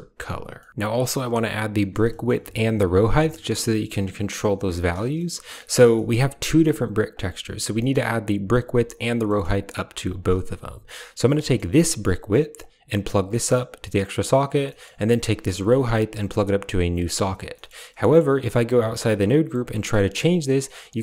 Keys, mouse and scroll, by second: 0.5 middle click, 0.5 drag, 2.1 shift+click, 4.8 click, 5.0 middle click, 5.5 middle click, 5.8 middle click, 6.5 click, 7.0 click, 7.7 middle click, 9.1 middle drag, 9.9 click, 10.9 click, 11.3 middle click, 11.4 click, 12.5-13.9 drag, 14.1 click, 14.5 middle click, 15.7-16.9 drag, 17.4 middle click, 17.9 middle click, 18.5 Tab, 19.5-20.5 shift+drag.